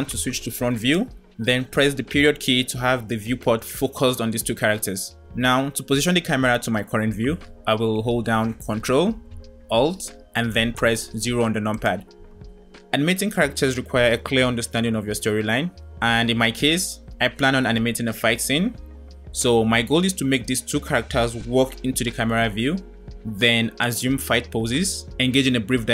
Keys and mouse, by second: 0.0 KP_1, 1.8 KP_Decimal, 10.9 ctrl+alt+KP_0, 17.9 KP_0.